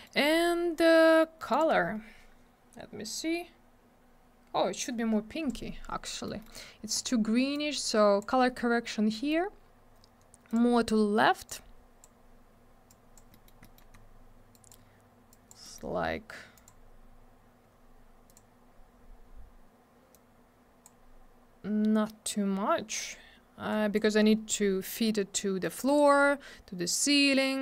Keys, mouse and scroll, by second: 0.1 middle click, 0.2 scroll down 1, 1.5 click, 1.6 click, 3.1 click, 6.1 middle click, 6.3 middle click, 6.4 scroll up 2, 6.4 middle click, 7.0 click, 7.1 click, 7.5 click, 9.1 middle click, 9.3 middle click, 10.5 click, 10.5 click, 11.5 click, 12.9 click, 13.3 scroll up 1, 13.5 middle click, 13.6 middle click, 13.8 double middle click, 13.9-14.6 scroll down 1, 14.6 click, 14.7 click, 15.3 click, 15.5 click, 15.6 middle click, 15.8 middle click, 16.6 click, 16.7 click, 18.3 click, 18.3 click, 20.1 click, 23.7 click, 25.6 click, 27.3 click.